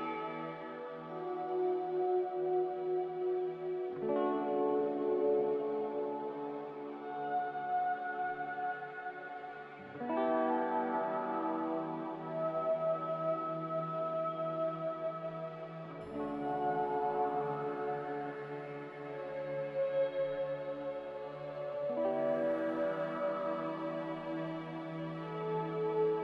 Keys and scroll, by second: 0.1 z, 10.2 z, 11.7 Delete, 13.3 m, 14.8 Escape, 19.9 a, 21.7 m.